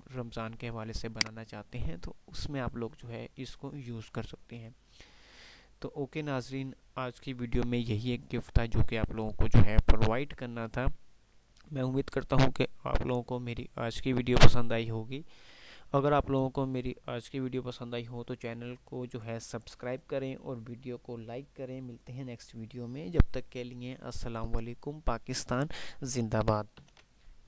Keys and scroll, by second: 0.1 F2, 27.1 F10.